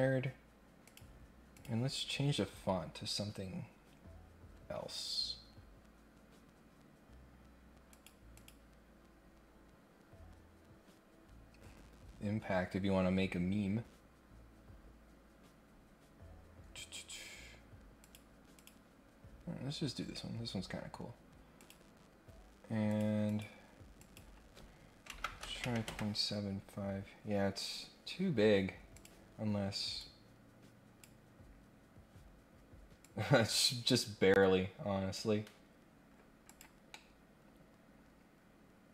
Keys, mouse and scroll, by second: 0.8 click, 1.5 click, 2.8-3.4 scroll down 1, 4.4 scroll down 2, 5.0-6.0 scroll down 4, 6.0 scroll up 2, 7.0-7.3 scroll up 2, 7.9 click, 8.3 click, 9.3 scroll down 1, 10.0 scroll down 1, 11.2 scroll down 1, 12.2 scroll down 1, 13.4 scroll down 1, 14.3-14.7 scroll down 1, 14.8 scroll down 1, 15.4-15.8 scroll up 2, 16.2 scroll up 1, 17.0 scroll up 1, 18.0 click, 18.6 click, 21.6 click, 22.9 click, 23.2 click, 23.9 click, 26.9 scroll down 2, 27.2-27.9 scroll up 2, 28.9 click, 29.9-31.0 drag, 33.0-35.1 drag, 36.4 click, 36.9-38.9 middle drag.